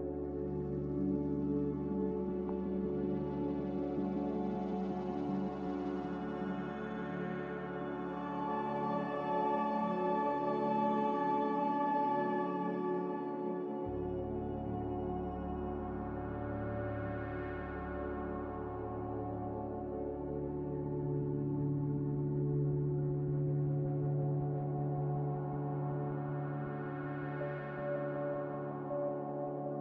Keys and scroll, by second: 0.8 1, 1.1 0, 1.4 Return, 4.8 Return, 8.8 Return, 13.0 z, 20.5 ctrl+z, 26.0 Return.